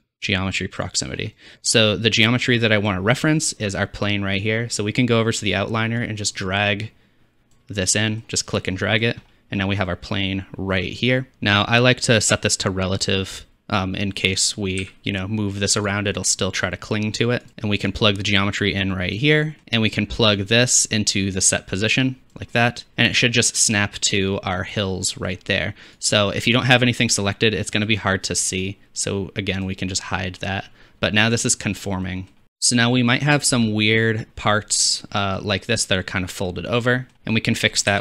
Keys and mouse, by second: 2.7-15.2 drag, 14.9 g, 15.3-18.0 middle drag, 18.0-20.3 drag, 20.4-25.8 drag, 26.1-29.6 drag, 29.7 click, 30.3 middle click, 31.0-32.2 drag, 32.2 middle click, 32.4 ctrl+s, 32.4-36.0 drag, 32.4 shift+z, 37.1-38.0 drag, 37.1-38.0 middle drag, 37.1-38.0 right drag, 37.1 shift+z, 37.9 shift+a.